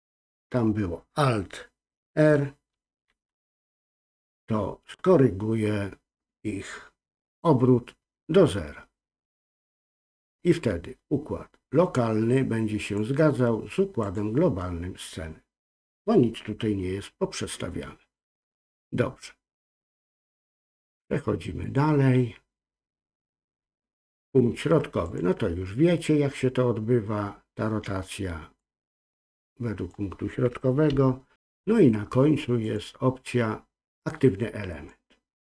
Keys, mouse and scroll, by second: 12.8-14.4 drag, 19.6-20.7 drag, 21.6-25.2 drag, 28.6 click, 28.7-29.9 drag, 30.9 ctrl+z, 32.6-34.9 drag.